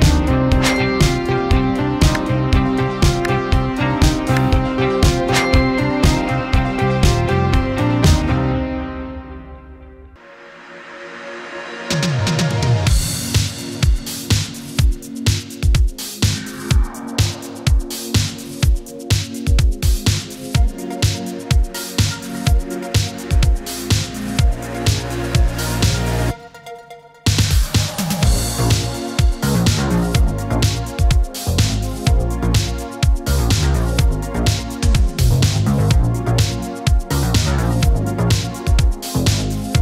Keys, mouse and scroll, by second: 3.5-4.2 drag, 6.1 space, 6.4-8.9 drag, 12.4-14.4 typing, 16.1-19.1 typing, 20.3 click, 24.4-25.3 drag, 31.6 ctrl+d, 33.0-34.3 shift+drag, 35.4-35.9 scroll up 1, 35.9-36.6 middle click, 36.7 click.